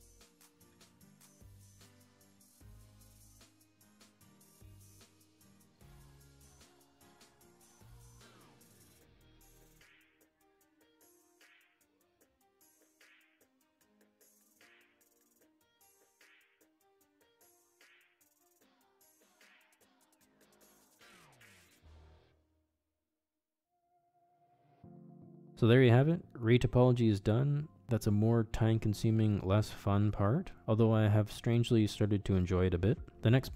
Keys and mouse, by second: 0.6 middle click, 1.4 click, 1.8 ctrl+z, 2.0 shift+c, 2.1 ctrl+click, 2.4 ctrl+click, 2.6 shift+middle click, 3.2 ctrl+click, 3.4 ctrl+click, 3.8 ctrl+click, 4.1 middle click, 4.6 ctrl+click, 4.8 ctrl+click, 4.9 middle click, 5.3 middle click, 6.1 f, 6.8 shift+click, 7.0 shift+click, 7.2 shift+middle click, 7.4 shift+click, 7.7 shift+click, 7.9 shift+click, 8.4 shift+click, 8.7 shift+click, 9.1 middle click, 9.4 shift+click, 9.8 shift+click, 10.2 f, 10.4 middle click, 10.5 shift+c, 10.6 click, 11.1 click, 11.5 shift+click, 11.7 shift+click, 12.6 middle click, 13.3 middle click, 13.5 middle click, 14.5 ctrl+Tab, 15.4 click, 15.8 ctrl+Tab, 17.4 f, 17.6 middle click, 18.1 click, 18.6 ctrl+z, 18.7 click, 19.4 middle click, 19.6 shift+c, 19.7 ctrl+click, 20.1 middle click, 20.5 ctrl+click, 20.6 ctrl+click, 21.3 f, 21.4 s, 21.5 click, 21.8 shift+click, 22.3 shift+click, 22.6 shift+click, 23.3 shift+click, 23.6 middle click, 24.1 shift+c, 24.8 ctrl+click, 25.0 middle click, 25.8-33.5 shift+middle drag.